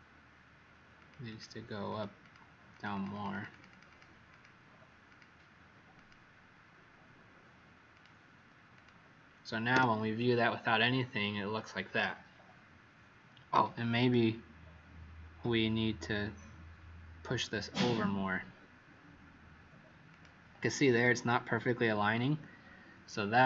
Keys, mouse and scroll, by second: 1.2 click, 1.8 click, 2.2 click, 2.7 click, 3.0 click, 3.2 click, 3.4 click, 3.6 click, 3.8 click, 4.2 click, 5.0 click, 8.0 click, 9.7 w, 10.7-13.9 scroll up 3, 13.9 click.